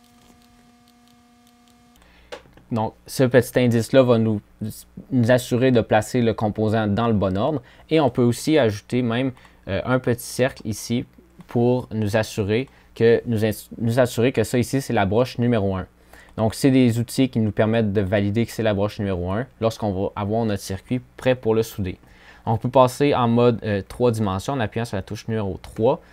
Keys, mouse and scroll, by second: 22.4 3.